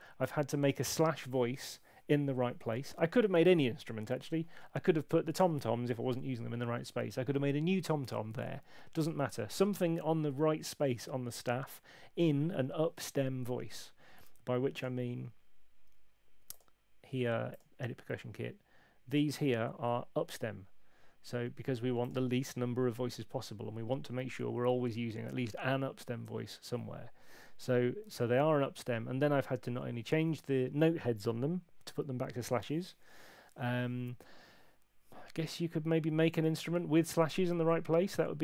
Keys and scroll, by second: 28.1 super+2.